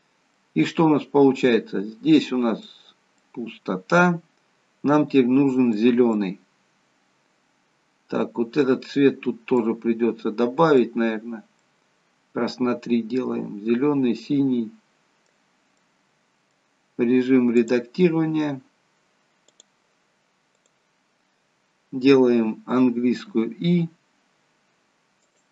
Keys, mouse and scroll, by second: 2.3 middle click, 7.3 middle click, 9.7 middle click, 12.8 middle click, 16.0 middle click, 16.0-17.7 scroll up 1, 17.7 click, 23.4 i.